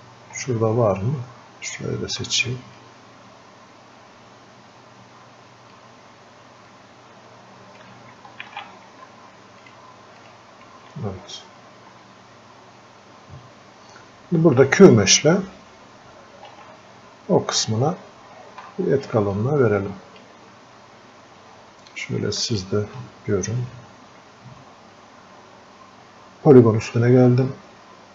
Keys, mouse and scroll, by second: 0.1 scroll, 0.3 scroll down 1, 3.1-8.9 alt+drag, 8.9 ctrl+z, 11.5 alt+click, 11.5-12.0 scroll up 1, 12.3-13.1 scroll down 1, 16.5 f, 17.7-18.1 scroll down 1, 18.7 alt+click, 19.3-20.7 drag, 20.7 scroll down 1, 21.9-25.3 alt+drag, 27.3-28.1 alt+drag.